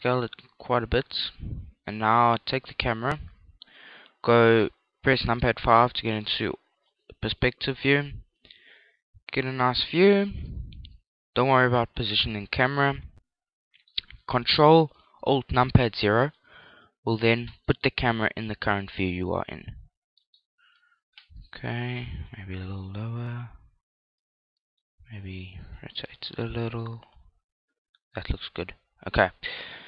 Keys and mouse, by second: 0.9 click, 2.2-4.3 middle drag, 5.5 KP_5, 6.3-14.2 middle drag, 15.4 ctrl+alt+KP_0, 16.9 right click, 17.7 g, 18.7 click, 20.3 middle click, 20.7 ctrl+alt+KP_0, 22.3 g, 24.0-27.6 drag, 24.7 r, 25.9 g, 29.0 click.